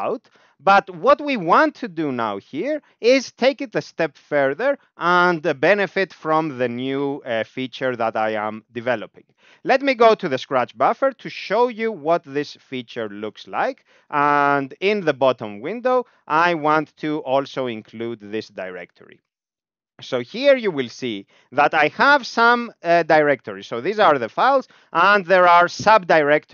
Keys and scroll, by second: 10.2 Down, 11.3 Down, 15.4 Down, 15.5 Down, 15.8 Down, 16.2 Down, 16.5 Up, 18.1 Page_Up, 18.7 g, 19.3 Up, 19.5 Up, 19.8 Up, 20.2 Down, 20.3 Down, 20.6 Down, 20.8 Down, 21.0 Up, 21.2 Up, 21.4 Up, 21.5 Up, 21.8 Down, 22.0 Down, 22.3 Down, 22.5 Down, 22.6 Down, 22.8 Down, 23.0 Down, 23.2 Down, 23.6 Up, 23.7 Up, 23.9 Up, 24.0 Up, 24.2 Up, 24.7 Up, 24.7 Up, 24.8 Up, 25.0 Up, 25.4 Up, 25.7 Down, 25.9 Down, 26.1 Down.